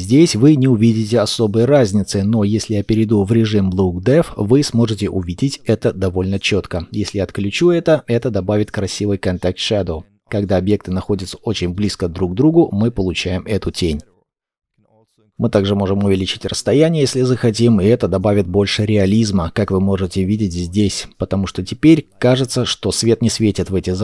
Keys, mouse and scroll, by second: 7.4 double click, 9.3 scroll down 1, 12.5-14.2 scroll down 1.